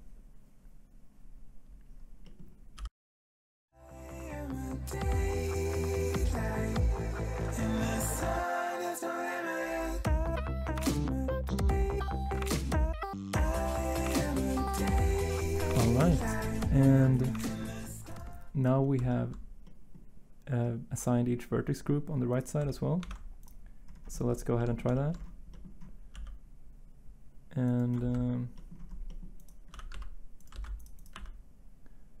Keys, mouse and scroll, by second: 3.6 l, 4.4 l, 5.5-10.1 typing, 11.2-14.5 typing, 23.0 ctrl+Tab, 26.1 g, 28.0 ctrl+z, 29.7 r, 29.9 x, 30.5 ctrl+z, 31.1 r.